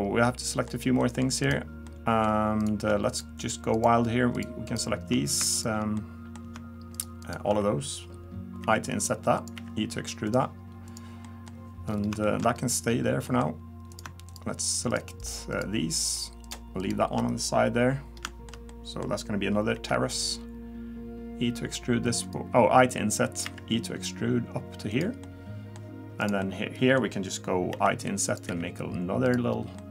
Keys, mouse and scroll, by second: 0.3 middle click, 1.0 middle click, 1.4 click, 1.9 middle click, 3.1 shift+click, 3.4 shift+click, 4.0 shift+click, 4.4 shift+click, 4.9 shift+click, 6.0 middle click, 6.9 shift+click, 7.2 shift+click, 8.6 i, 9.5 e, 10.9 click, 11.2 middle click, 11.9-12.2 scroll down 3, 12.2 shift+middle click, 12.5-12.9 scroll up 1, 12.9-13.2 scroll down 1, 13.3 middle click, 13.9 click, 14.3 shift+click, 14.9 click, 15.6 click, 16.3 click, 16.8 click, 17.5-18.0 scroll up 1, 18.3 shift+middle click, 18.7 middle click, 19.7 i, 23.4 e, 25.2 middle click, 26.2 click, 26.4 middle click, 27.7 i, 28.5 e, 29.5 scroll down 1, 29.8 middle click.